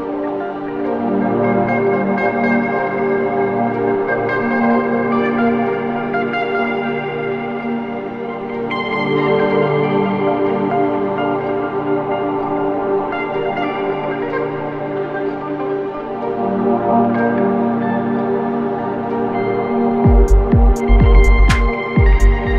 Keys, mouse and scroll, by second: 0.0-1.7 drag, 4.5-14.2 drag, 16.7-22.5 drag.